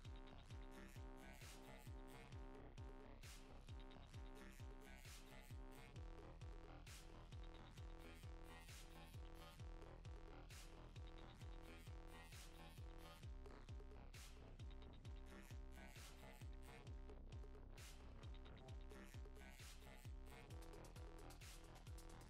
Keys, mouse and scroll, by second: 0.3 click, 2.0 scroll down 2, 2.2 middle click, 2.7 shift+middle click, 2.9 shift+scroll down 1, 3.6 middle click, 3.9 shift+middle click, 4.2 scroll down 2, 4.7 f, 6.6 click, 7.3 click, 15.0 click, 15.8 f, 16.2-16.8 scroll up 2, 16.8 click, 19.3-19.6 scroll down 2, 19.4 middle click, 19.7-20.2 scroll up 5, 20.0 shift+middle click, 20.3 middle click, 20.9 middle click, 21.4 middle click.